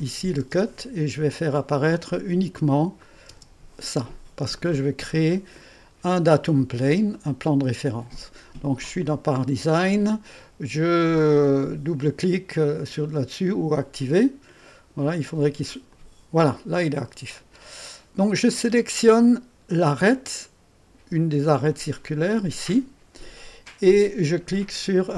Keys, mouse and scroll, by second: 0.0 click, 0.4 space, 1.4 click, 3.0 click, 3.3 typing, 4.6-5.7 drag, 6.6-6.9 scroll up 1, 7.4 right click, 11.3-13.2 middle drag, 13.7 click, 15.1 click, 15.7 click, 17.3 click, 22.0 click.